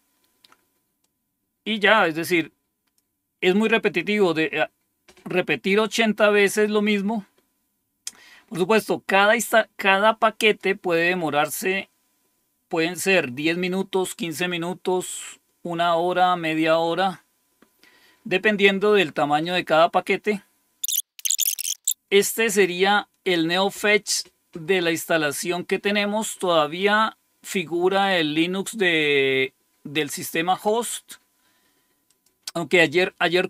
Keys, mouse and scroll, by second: 1.0-3.0 drag, 10.4 click, 20.8-21.2 scroll down 1, 21.5-22.3 typing, 26.7-28.6 drag, 32.0 click.